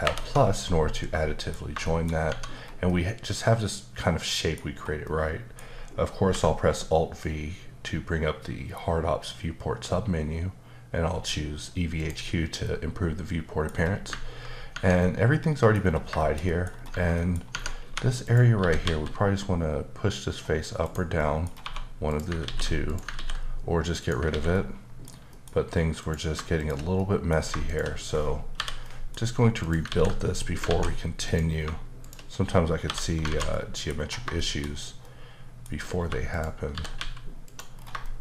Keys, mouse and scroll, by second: 0.0 ctrl+alt+KP_Add, 0.9 middle click, 1.8 shift+middle click, 2.3 Tab, 2.5-2.9 scroll down 2, 2.9 middle click, 5.0 middle click, 6.2 alt+v, 12.0 click, 12.6 middle click, 13.7 scroll up 1, 14.7 Tab, 15.0 middle click, 15.8 scroll up 2, 16.2 shift+middle click, 16.7 scroll up 2, 16.9 Tab, 17.2 middle click, 17.4 scroll up 1, 17.5 Tab, 17.8-18.8 typing, 18.2 click, 20.8 right click, 21.2 middle click, 21.4 scroll up 1, 21.6 1, 22.1 click, 22.4 ctrl+x, 22.9 click, 23.1 ctrl+x, 24.0 click, 24.3 ctrl+x, 24.5 middle click, 25.3 middle click, 26.0 click, 26.6 shift+click, 27.0 middle click, 27.7 shift+click, 28.6 j, 28.8 middle click, 29.6 click, 29.9 ctrl+x, 30.4 middle click, 30.6 alt+z, 31.3 click, 32.0 shift+click, 32.8 j, 33.3 alt+z, 33.5 middle click, 33.9 scroll up 2, 34.3 shift+middle click, 36.0 3, 36.3 click, 36.7 g, 37.4 click, 37.7 scroll down 2, 38.0 shift+middle click.